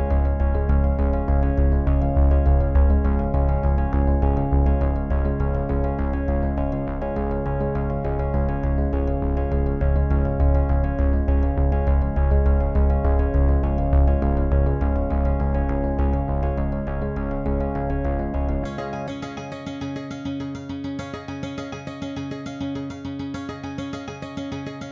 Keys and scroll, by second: 16.3 0.